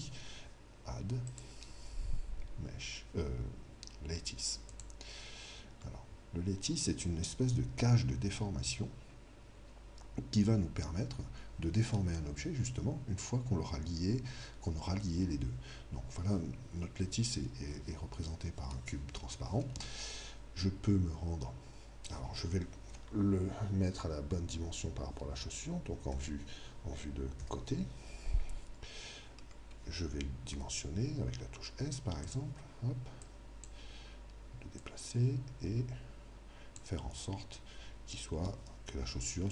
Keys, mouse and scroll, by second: 1.3 click, 5.5-7.7 middle drag, 26.1 KP_3, 27.4 KP_1, 28.4-31.6 middle drag, 30.5 s, 32.4-36.8 drag, 32.6 m, 39.2-39.5 middle drag.